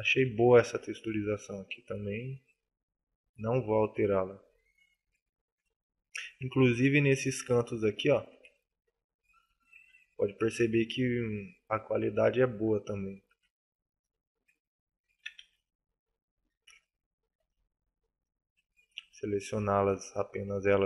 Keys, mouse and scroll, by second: 0.2 a, 0.4 middle click, 0.9 middle click, 1.9 middle click, 2.4 middle click, 5.1-5.6 scroll up 4, 5.6 shift+middle click, 6.4 shift+middle click, 7.5-7.9 scroll up 1, 7.9 shift+middle click, 8.8 middle click, 8.8 scroll up 1, 9.8 shift+middle click, 10.4 middle click, 13.2 Tab, 13.8 right click, 13.9 right click, 14.7 alt+right click.